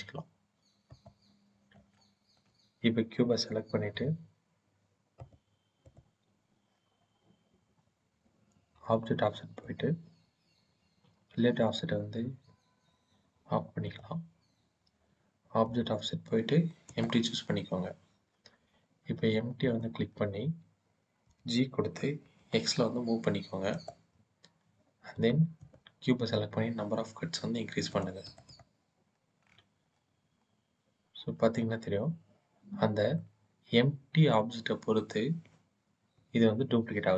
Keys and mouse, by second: 0.8 click, 1.8 shift+click, 3.5 click, 4.9 click, 5.6 click, 9.4 click, 13.7 click, 15.6-16.9 drag, 19.3 click, 21.1 g, 21.9 x, 23.6 click, 27.7 click, 28.2 click, 29.7-30.1 middle drag, 30.1-31.3 drag, 31.3-33.0 middle drag, 35.9 KP_1.